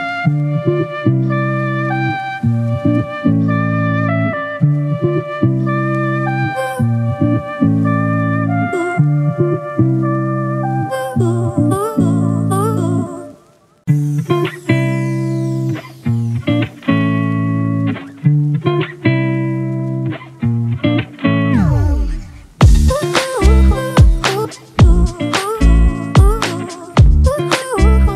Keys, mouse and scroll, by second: 3.3 double click, 7.6-10.2 scroll down 1, 19.6-20.6 typing.